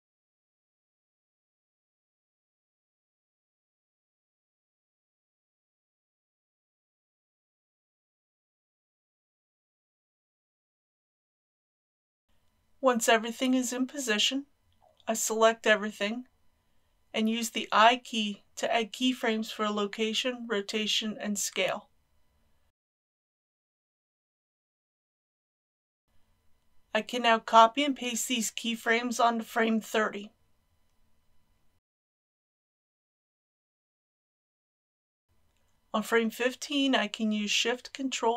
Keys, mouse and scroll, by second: 1.3 shift+click, 2.0 ctrl+z, 3.0 click, 3.6 r, 6.4 click, 8.0 r, 8.3 x, 11.3 click, 12.0 KP_1, 12.3-13.8 scroll down 1, 13.8 a, 17.1 i, 18.8-27.6 drag, 28.5 ctrl+c, 29.3-31.3 drag, 31.5 ctrl+v, 33.9-37.6 drag.